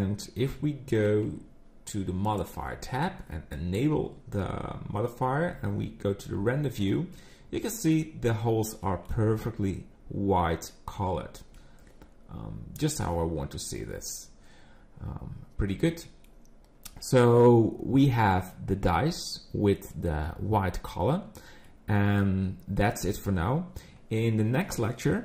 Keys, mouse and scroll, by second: 2.2 click, 5.5 z, 7.1 middle click, 8.4 scroll up 3, 8.9 middle click, 9.2 scroll up 2, 11.0 scroll down 4, 11.6 middle click, 13.2-13.6 scroll down 2, 13.6 middle click, 21.2 scroll down 2, 21.6 middle click.